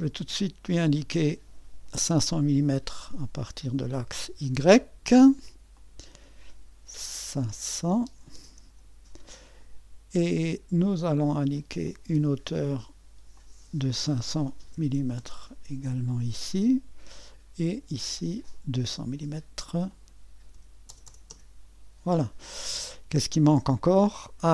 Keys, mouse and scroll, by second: 0.4 middle click, 1.2-7.6 drag, 7.4-8.6 typing, 8.6 Return, 11.8-14.6 drag, 14.4-15.4 typing, 15.7 Return, 18.4-20.6 drag, 20.3-21.8 typing.